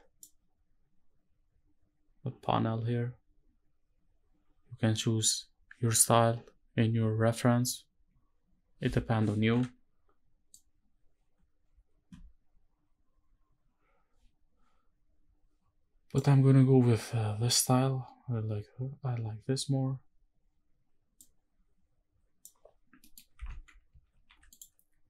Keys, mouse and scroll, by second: 22.7 middle click.